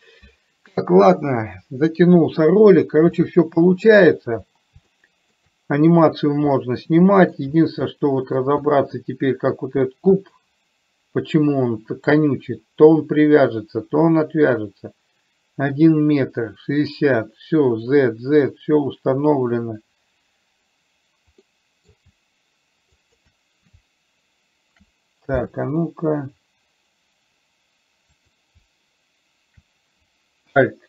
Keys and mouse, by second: 3.6-4.2 middle drag, 5.3 shift+middle click, 7.0-7.7 middle drag, 8.2-8.7 middle drag, 9.3-10.0 middle drag, 10.7 click, 21.8 middle click, 23.3 shift+click, 28.5 click.